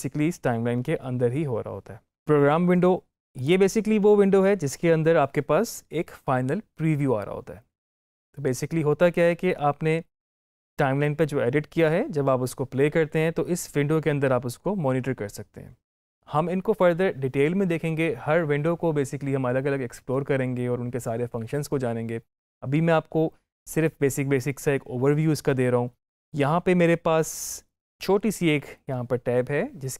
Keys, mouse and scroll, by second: 3.2 click, 27.8 click.